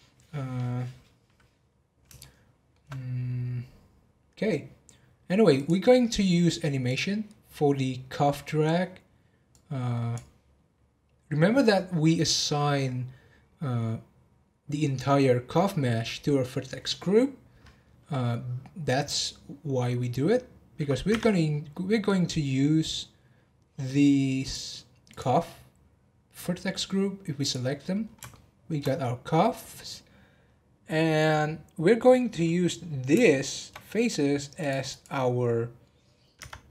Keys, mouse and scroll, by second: 1.8-2.2 scroll down 2, 2.2-5.3 shift+middle drag, 5.5 click, 6.8 click, 9.5-12.6 drag, 24.4 click, 25.1 click, 27.4 click, 27.8-28.3 scroll down 7, 28.3-28.9 shift+middle drag, 28.9-31.9 scroll up 1, 32.8-33.2 scroll down 1, 33.2-34.6 shift+middle drag, 34.6 click, 34.9 click, 36.4 Tab.